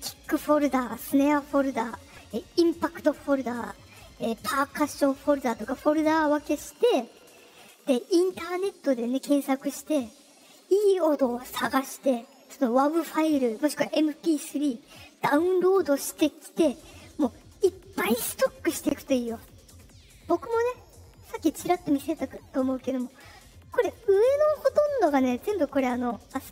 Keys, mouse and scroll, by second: 20.7 click.